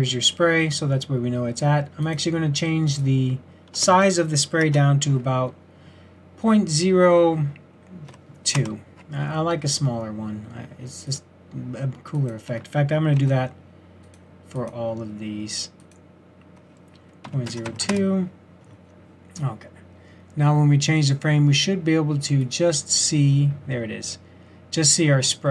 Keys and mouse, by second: 11.1-14.0 drag, 14.6 middle click, 15.5-17.8 drag, 23.0-24.4 middle drag.